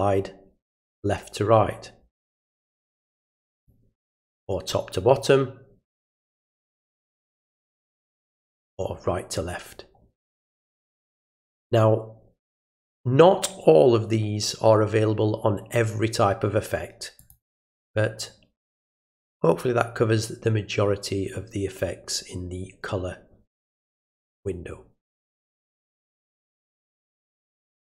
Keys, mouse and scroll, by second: 3.5 click, 7.5 click, 12.5 click, 17.2 click, 26.5 click.